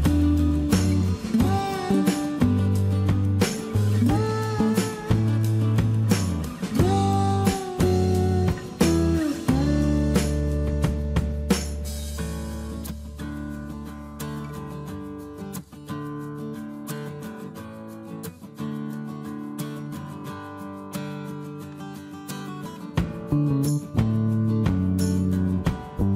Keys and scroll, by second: 10.8 1, 10.9 1, 12.8-14.1 typing, 14.5 Return, 17.4 shift+space, 17.5 Escape, 18.7 shift+m, 21.1 space, 22.8 space, 25.3 m.